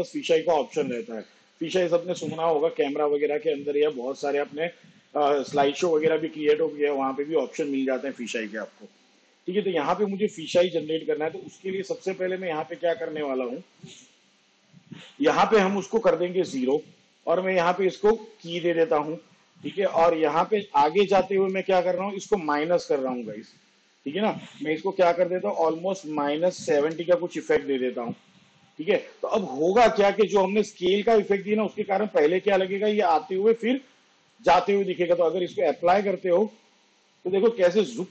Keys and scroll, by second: 16.9 0, 25.2 -, 26.7 7, 35.2 space.